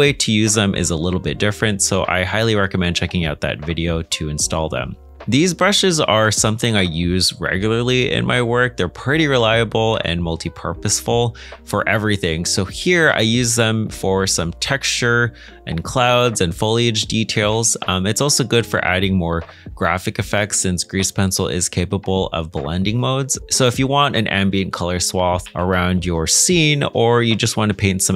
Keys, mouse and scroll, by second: 5.0 middle click, 9.0 middle click, 17.5 g, 21.4 middle click, 27.8 middle click.